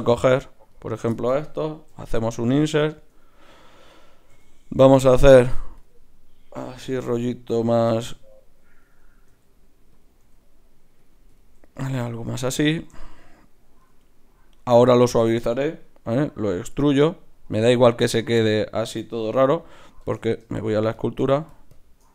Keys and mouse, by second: 1.9 i, 4.3 w, 7.0 r, 8.0 r, 9.3 s, 10.0 click, 10.2 r, 16.1 e, 20.1 Tab, 20.6-22.1 drag.